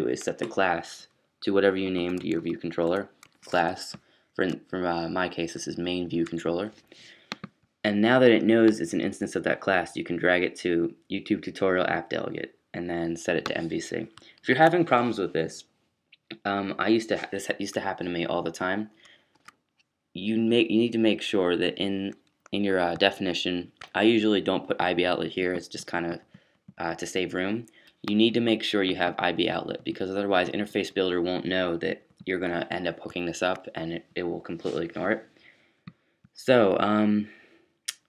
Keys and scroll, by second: 1.9-2.3 typing, 14.5 super+s, 19.3 super+q.